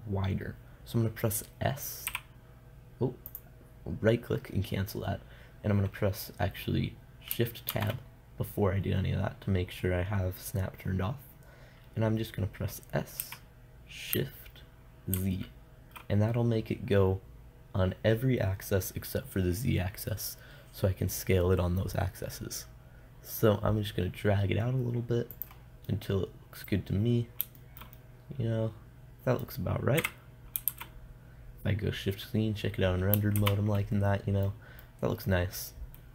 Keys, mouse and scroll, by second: 2.5 s, 8.1 shift+Tab, 13.7 s, 25.9 click, 26.8-28.0 middle drag, 29.9 middle click, 30.4 KP_0, 31.1 shift+z, 33.8 shift+z, 34.5-35.6 middle drag.